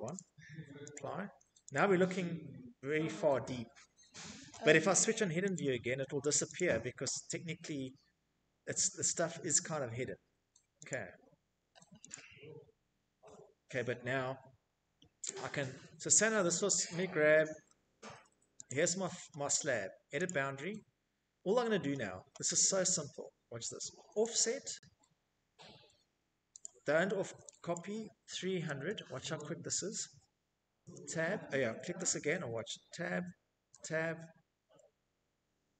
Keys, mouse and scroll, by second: 0.3 click, 1.1 middle click, 1.3 middle click, 1.5 middle click, 1.8 middle click, 2.7 middle click, 2.8 middle click, 4.0 click, 5.0 click, 7.3 Escape, 7.5 middle click, 7.8 middle click, 9.4 click, 10.6 click, 11.6 Escape, 11.8 middle click, 11.8 scroll, 12.8 Escape, 13.1-13.5 scroll, 14.0 Escape, 14.0 middle click, 15.0 Tab, 15.4 Tab, 16.2 Tab, 22.2 click, 22.2 middle click, 22.8 click, 25.1 click, 26.2 click, 26.8-28.2 typing, 29.3 Tab, 32.2 Tab.